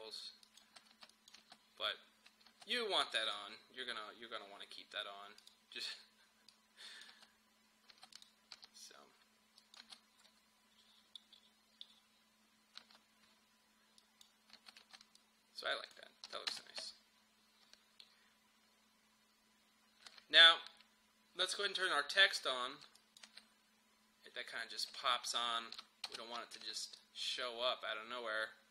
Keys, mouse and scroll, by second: 0.6 space, 1.1 click, 1.4 space, 3.3 click, 7.1 space, 8.1 click, 8.6 u, 9.6 click, 9.9 space, 12.9 space, 14.0 click, 14.6 space, 15.2 click, 16.3 n, 16.5 space, 20.1 space, 21.8 click, 23.3 space, 25.3 click, 26.1 space, 27.0-28.7 drag.